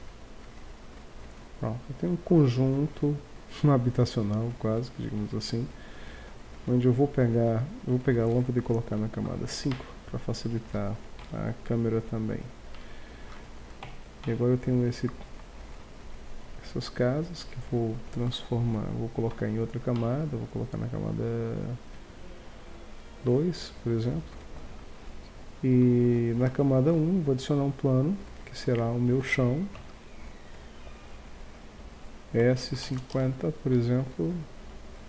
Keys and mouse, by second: 0.8-1.3 middle drag, 5.1 KP_1, 7.9 right click, 8.8 m, 9.7-10.3 middle drag, 10.5-12.4 drag, 11.2 m, 13.8 b, 15.5 z, 16.0 z, 18.4 middle click, 19.3 m, 26.2 shift+c, 27.0 shift+a, 29.7 Tab, 32.4 s.